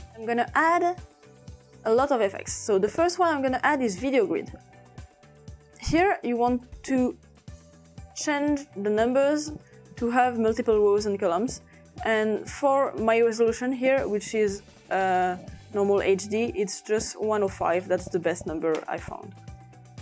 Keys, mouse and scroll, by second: 0.0-3.0 drag, 0.1 s, 3.6-4.8 typing, 5.7-6.7 drag, 7.1 click, 8.4 click, 9.5-11.2 drag, 12.0-13.6 drag, 16.1 typing, 17.5-18.5 drag, 17.5-18.3 typing, 18.8 Return.